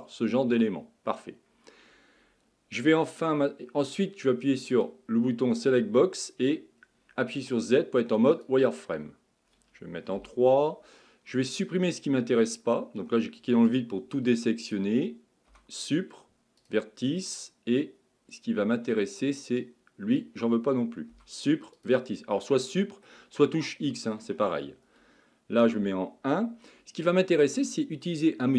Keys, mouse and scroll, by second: 4.7 click, 5.5-6.8 middle drag, 6.8-7.4 scroll down 2, 7.4 z, 10.2 KP_3, 11.9-15.5 drag, 15.5 Delete, 17.3-19.6 middle drag, 19.6-21.1 drag, 21.1 Delete, 22.4-25.8 middle drag, 25.8 KP_1.